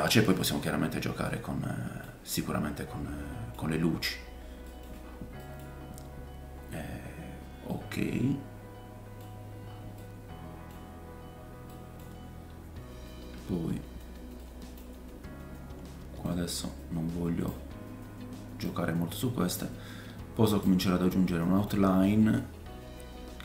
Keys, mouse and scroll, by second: 2.3 middle click, 3.8-4.6 scroll down 4, 4.7-15.5 middle drag, 5.0 scroll up 2, 5.7-7.3 scroll up 5, 9.4-10.0 scroll up 3, 10.8 scroll up 1, 10.9-11.7 scroll down 3, 12.3-13.0 scroll down 3, 13.7-14.2 scroll up 4, 16.2 click, 18.7 click, 21.7 middle click, 22.0-23.4 scroll up 3.